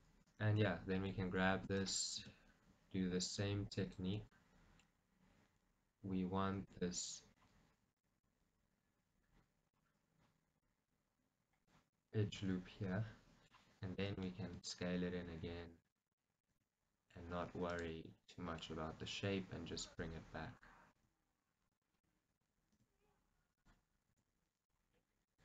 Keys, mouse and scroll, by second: 0.7-1.9 middle drag, 1.6 e, 1.9 right click, 2.3 s, 4.1 click, 4.3-5.5 middle drag, 5.0-5.5 scroll, 6.7 g, 8.0 click, 8.3-10.7 middle drag, 10.7-12.0 drag, 12.0-14.0 middle drag, 14.0 e, 14.2 right click, 14.5 s, 16.0 click, 16.3 middle click, 16.6 g, 17.9 click, 18.2 middle click, 20.0-21.8 drag, 21.0 s, 22.3-23.7 middle drag, 22.8 s, 23.7 click, 24.2 g.